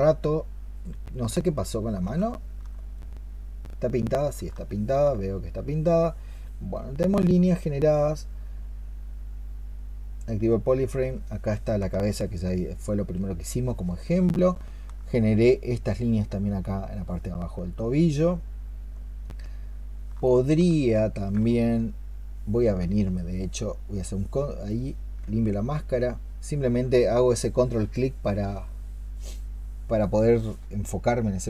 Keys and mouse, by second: 2.1 alt+click, 4.5 alt+click, 11.9 alt+click, 12.7 alt+click, 13.5 alt+click, 14.9 alt+click, 19.1 double click, 20.1 alt+click, 23.0 ctrl+click, 23.8 ctrl+click, 25.1 ctrl+click.